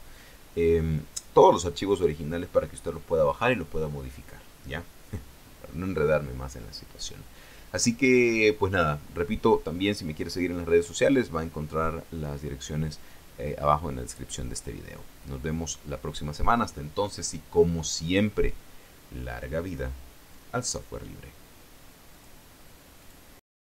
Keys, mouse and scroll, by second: 22.7 click, 23.5 click.